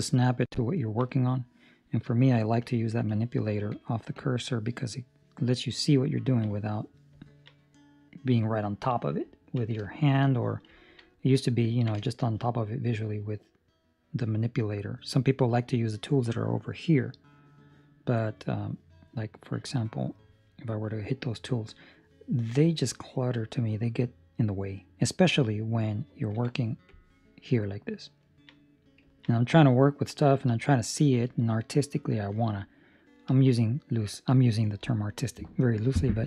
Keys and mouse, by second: 0.7 ctrl+middle click, 1.0 middle click, 2.0 click, 2.6 click, 6.2 ctrl+middle click, 7.5 ctrl+middle click, 9.2 middle click, 9.8 shift+middle click, 10.2 middle click, 10.7 ctrl+middle click, 11.0 middle click, 11.6 ctrl+middle click, 11.9 shift+middle click, 12.3 middle click, 20.6 click, 23.0 middle click, 27.4 middle click, 28.2 ctrl+middle click, 28.5 middle click, 29.0 ctrl+middle click, 30.0 middle click.